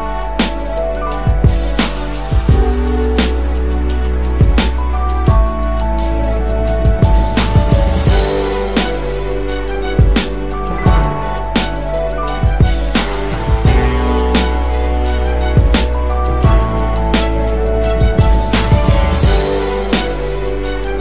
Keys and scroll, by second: 16.2 ctrl+z.